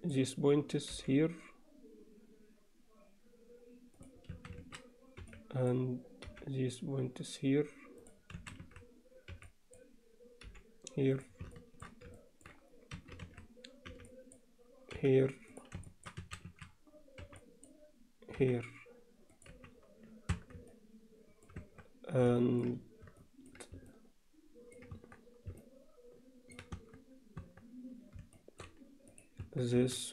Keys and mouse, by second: 1.0 g, 4.4 a, 5.2 b, 6.3 g, 8.4 a, 9.3 b, 10.5 g, 11.6 alt+shift+middle click, 12.2 ctrl+alt+middle click, 13.0 a, 13.9 b, 15.0 g, 15.9 alt+shift+middle click, 16.2 a, 17.2 b, 18.4 g, 19.5 z, 20.4 Tab, 20.7-21.5 alt+middle drag, 21.8 Tab, 22.4 alt+shift+middle click, 23.2 alt+shift+middle click, 23.9 alt+middle click, 25.0 Tab, 25.6-26.6 alt+middle drag, 27.4 Tab, 28.4 alt+shift+middle click, 29.1 click, 29.4 Tab, 29.8 a.